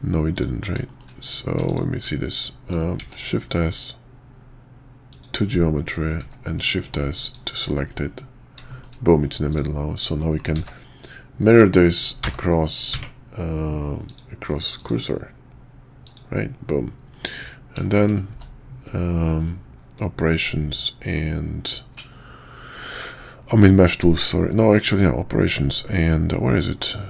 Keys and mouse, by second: 0.3 click, 0.9 shift+click, 1.2 click, 3.0 shift+s, 6.2 shift+s, 8.7 shift+drag, 9.5 click, 10.5 alt+x, 14.0-15.1 drag, 16.0 click, 17.1 middle drag, 17.8 shift+middle click, 18.3 q.